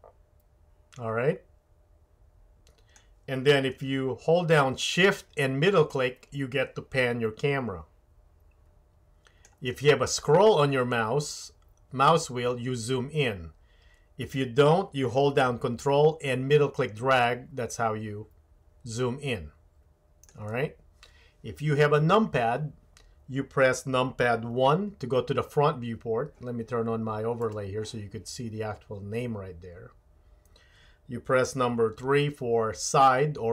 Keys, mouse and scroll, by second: 4.5-9.5 shift+middle drag, 15.8-26.3 ctrl+middle drag, 24.9 KP_1, 27.4 click, 32.0 KP_3.